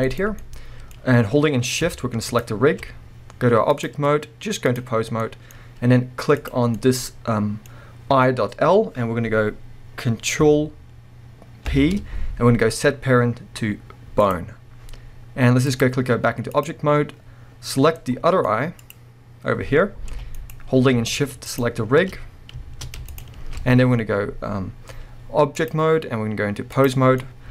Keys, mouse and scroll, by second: 0.2 right click, 0.4-2.3 middle drag, 2.3 shift+click, 3.7-5.2 drag, 5.2-6.4 middle drag, 5.5-6.4 scroll up 2, 6.4 click, 6.8-15.7 middle drag, 11.7 ctrl+p, 15.7-18.2 drag, 18.0 scroll down 2, 18.2-18.8 middle drag, 18.8 click, 20.1 g, 20.5 right click, 21.5 ctrl+click, 23.1 shift+click, 25.6-27.2 drag, 27.2-27.5 middle drag.